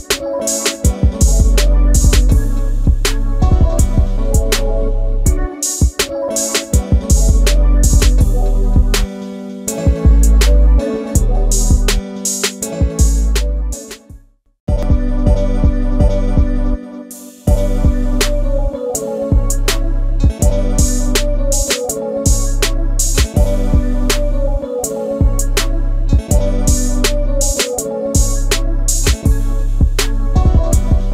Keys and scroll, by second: 0.0-0.4 typing, 0.5 Return, 2.3 Return, 2.7-3.6 typing, 5.3 Return, 6.6 space, 11.6 alt+a, 16.0 alt+Escape, 16.6 space, 20.5 w, 22.6 t.